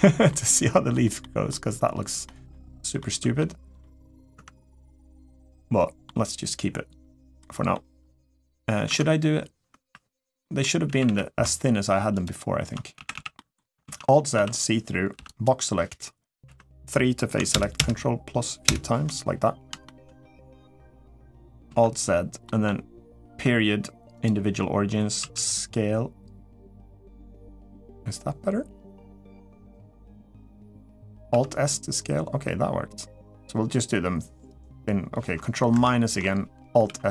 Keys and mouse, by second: 0.1 middle click, 1.0 middle click, 2.0 middle click, 2.8 middle click, 3.6 middle click, 4.1 Tab, 4.8-5.8 middle drag, 7.2 middle click, 8.6 Tab, 9.6 3, 10.2 middle click, 10.7 a, 10.9 a, 11.9 alt+shift+click, 12.8 a, 13.1 middle click, 13.1 a, 13.6 alt+z, 14.1 1, 14.9 b, 16.2 3, 17.3 ctrl+KP_Add, 17.5 ctrl+KP_Add, 19.6 middle click, 20.0 middle click, 21.4 alt+z, 22.2 middle click, 25.0 s, 31.1 alt+s, 35.5 ctrl+KP_Subtract, 36.6 alt+s.